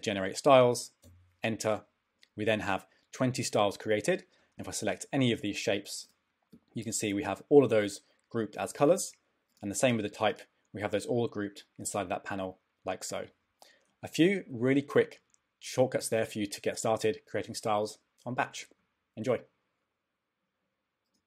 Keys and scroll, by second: 1.0 Return.